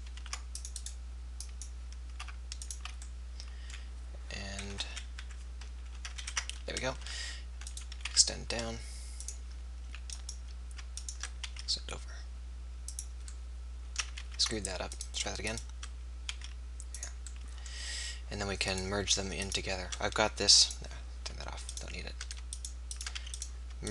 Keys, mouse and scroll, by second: 0.2 ctrl+r, 1.4 click, 3.1 click, 4.8 KP_1, 5.2 KP_3, 7.1 r, 8.2 e, 10.1 click, 11.5 e, 14.2 ctrl+z, 16.3 e, 18.6-23.2 drag, 20.7 right click, 21.6-23.2 right drag, 23.2 f.